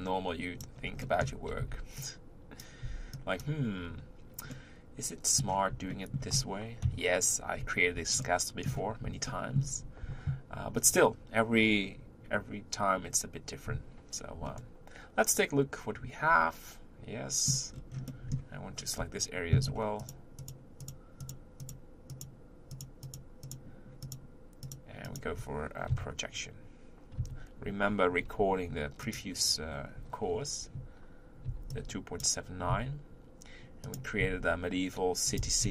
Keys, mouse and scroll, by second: 1.1-1.6 shift+middle drag, 1.6 b, 2.8 b, 4.5 middle click, 5.4-5.9 scroll up 1, 5.9 shift+middle click, 6.8 KP_3, 8.2-12.3 shift+middle drag, 14.4-16.5 middle drag, 16.7 middle click, 17.7-18.2 scroll down 4, 18.2 middle click, 18.6-20.0 scroll up 2, 20.0 shift+click, 20.4 shift+click, 20.8 shift+click, 21.2 shift+click, 21.6 shift+click, 22.1 shift+click, 22.7 shift+click, 23.1 shift+click, 23.4 shift+click, 24.0 shift+click, 24.6 shift+click, 25.0 shift+click, 25.9 KP_1, 27.2 KP_3, 28.2 u, 31.4 b, 32.7 s, 34.2 s, 35.4 g.